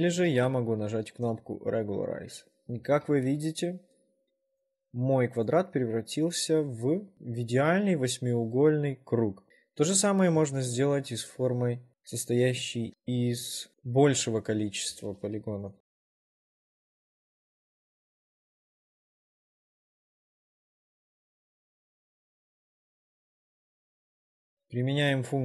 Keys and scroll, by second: 0.4 ctrl+z, 9.5 w, 10.6 ctrl+z, 12.6 2, 17.0 r, 18.5 w, 20.1 r, 20.9 w, 21.1 2, 22.9 r.